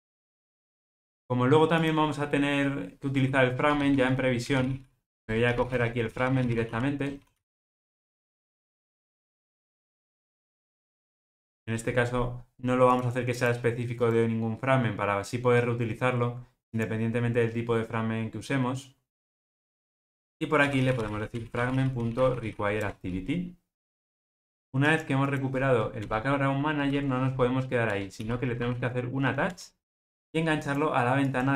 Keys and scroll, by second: 5.2 Return, 10.3 alt+Return, 22.8 Return, 29.5 Return.